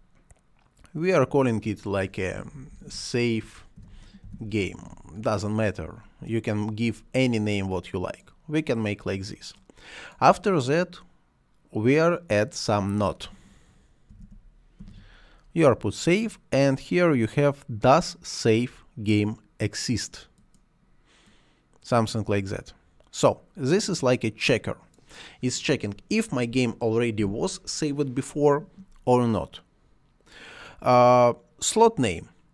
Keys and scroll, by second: 2.0-4.7 typing, 13.7-15.3 typing.